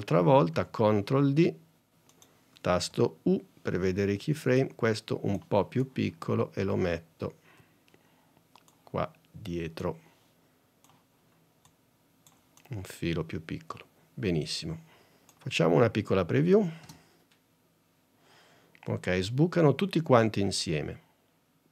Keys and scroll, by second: 0.6 super+d, 2.9 u, 16.9 space.